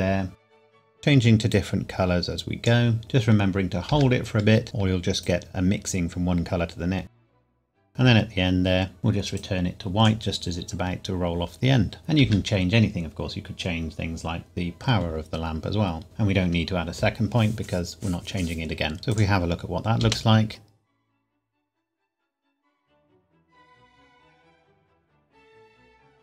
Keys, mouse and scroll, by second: 1.5 click, 5.2 click, 7.3 click, 7.4 click, 7.8 click, 7.9 click, 12.2 i, 16.0 click, 19.1 click, 20.0 space.